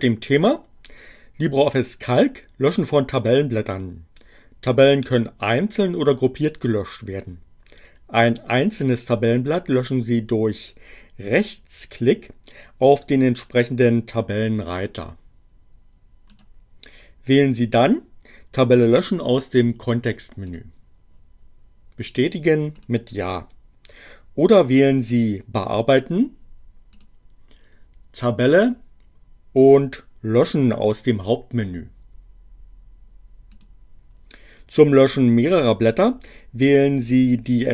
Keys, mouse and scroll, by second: 16.3 right click, 20.5 click, 22.7 click, 27.0 click, 31.3 click, 33.5 click.